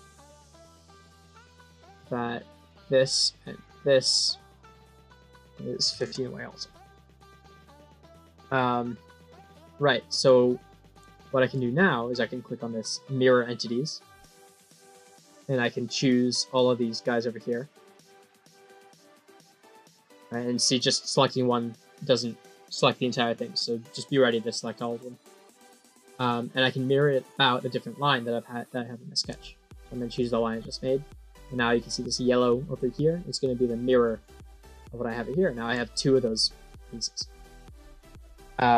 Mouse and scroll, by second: 1.6 click, 2.4 click, 3.5 click, 4.6 click, 7.0 right click, 7.8 click, 8.3-8.7 scroll up 2, 9.0 click, 9.5-10.1 drag, 10.4 click, 11.1 middle click, 14.3 click, 16.0 scroll down 4, 17.2 click, 18.0 click, 18.8 click, 19.6 click, 26.1 click, 28.7 middle click, 30.0 click, 30.4 scroll down 3, 31.0 middle click, 33.9 click, 35.3 middle drag, 37.5 middle click.